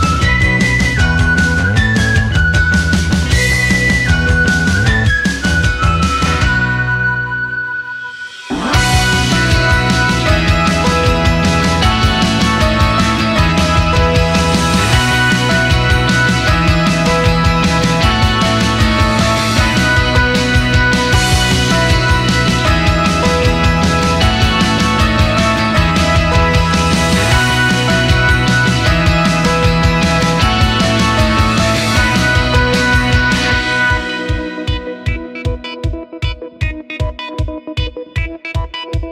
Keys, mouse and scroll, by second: 0.6 click, 1.4 click, 3.0 click, 4.4 click, 5.1 click, 5.9 drag, 6.6 s, 9.7 r, 12.9 click, 13.7-15.2 drag, 15.9 s, 17.4 click, 19.1 click, 20.3-22.1 drag, 22.4 click, 22.7-23.1 scroll up 2, 23.6 click, 24.6 click, 25.5 click, 26.1 click, 26.7 click, 31.1 click, 31.5 scroll down 1, 31.7-32.1 scroll up 2, 32.3-39.1 drag.